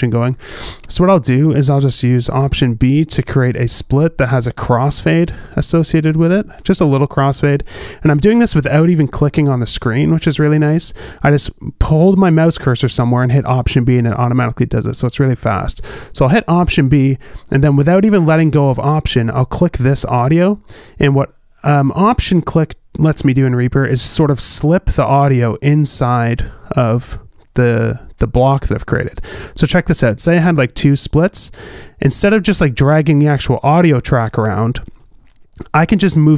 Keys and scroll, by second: 4.6 alt+b, 9.3 super+z, 9.9 super+z, 14.2 alt+b, 14.8 super+z, 17.4 alt+b, 30.7 alt+b, 35.5 super+z.